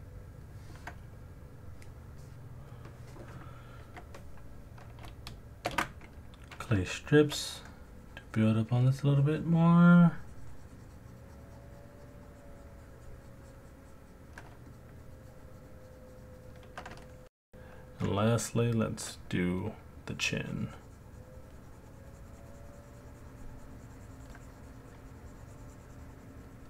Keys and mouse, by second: 0.1 ctrl+click, 5.6 shift+z, 6.9 middle click, 6.9 alt+click, 7.7 click, 14.7 shift+click, 15.0 shift+click, 15.2 shift+click, 15.8 shift+click, 17.1 middle click, 17.1 alt+click, 18.2 alt+click, 20.1 click.